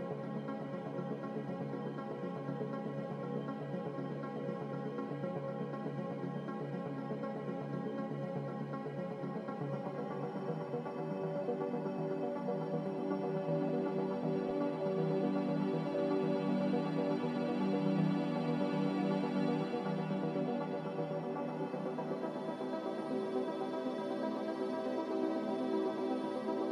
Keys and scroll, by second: 10.2-11.1 typing.